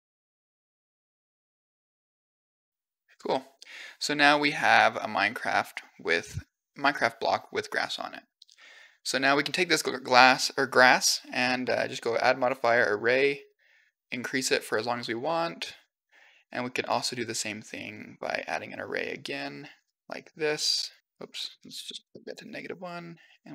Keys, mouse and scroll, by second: 0.0-1.2 typing, 0.0 click, 0.2 middle click, 0.4 middle click, 0.5 click, 0.6 shift+click, 0.7 click, 0.9 middle click, 1.0 click, 1.1 shift+click, 1.5 middle click, 1.6 click, 1.9 shift+click, 2.1 middle click, 2.2 middle click, 2.3 z, 2.4 middle click, 2.5 z, 2.6 scroll down 2, 2.6 middle click, 2.7 Tab, 2.7-3.1 middle drag, 3.4-4.2 middle drag, 4.4-5.6 middle drag, 5.9-6.6 middle drag, 7.3 middle drag, 8.4 scroll down 2, 8.8 click, 11.1 click, 11.8-12.6 drag, 13.3-15.5 drag, 16.6-18.3 drag, 19.6 click, 21.1-22.5 drag, 23.4-23.5 drag.